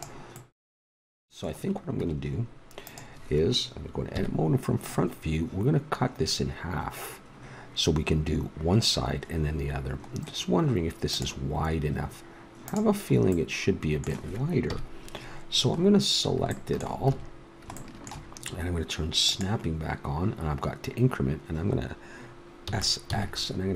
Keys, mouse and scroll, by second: 0.3-1.6 middle drag, 1.9 Tab, 4.1 KP_1, 13.3-14.6 middle drag, 14.6 KP_1, 14.7-16.5 middle drag, 17.0 a, 19.2-21.1 drag, 22.6 s.